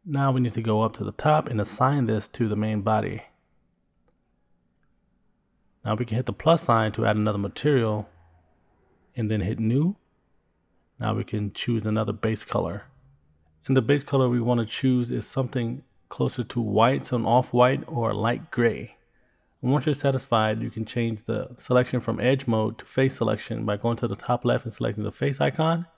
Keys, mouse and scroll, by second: 0.1-0.9 scroll up 4, 4.9 click, 7.8 click, 10.3 click, 14.9 click, 22.5 click, 24.6 click.